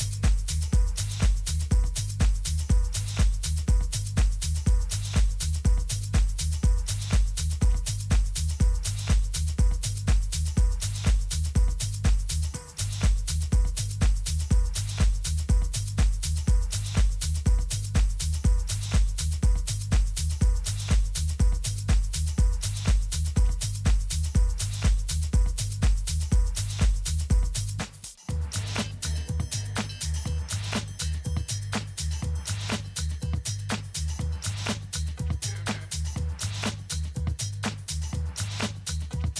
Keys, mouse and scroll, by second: 3.8 shift+a, 7.2-10.5 middle drag, 12.2 g, 16.0 Tab, 16.4 a, 19.6 b, 21.8-23.6 drag, 27.3-31.0 middle drag, 34.1-35.1 middle drag, 35.1-38.2 drag, 36.3 a, 38.3-39.3 middle drag.